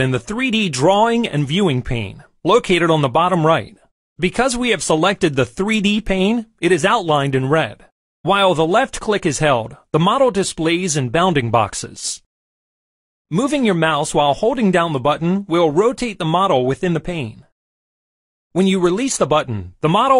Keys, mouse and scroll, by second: 0.4 middle click, 0.6 middle click, 0.8 middle click, 1.7-20.0 drag.